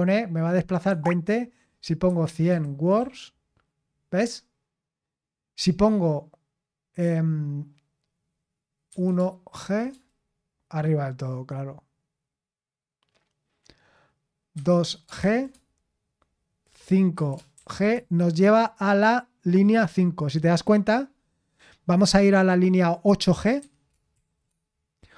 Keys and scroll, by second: 0.8 Escape, 1.8-3.4 typing, 8.8-9.5 typing, 14.5-15.2 typing, 17.1-17.5 typing, 23.5-24.1 typing.